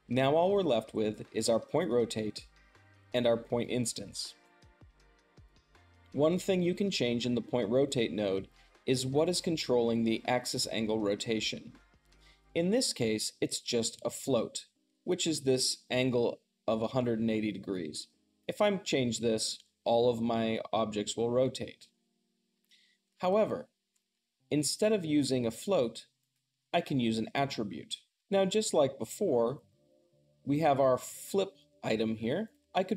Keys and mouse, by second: 0.0-32.9 drag.